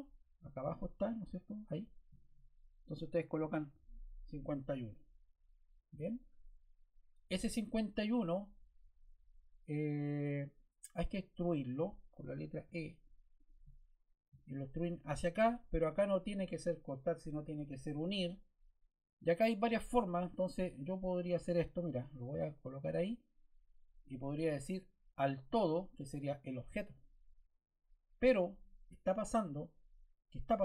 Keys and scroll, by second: 3.3 5, 3.6 1, 4.1 Return, 12.5 e.